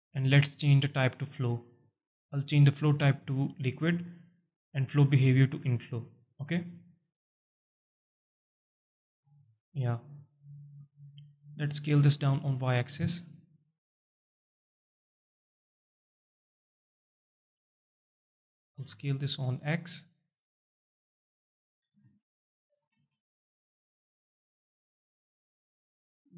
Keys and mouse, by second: 2.6-3.6 drag, 4.8-5.7 drag, 6.9-7.7 alt+drag, 8.3 drag, 9.1 KP_7, 10.8 alt+shift+click, 11.9 s, 12.6 y, 13.8 click, 14.1 z, 14.6-16.0 alt+drag, 16.6 KP_7, 17.3 z, 18.0 alt+shift+drag, 18.6 s, 18.7 x, 21.5 click, 21.8 s, 22.6 shift+click, 22.9 z, 23.2-26.3 alt+drag.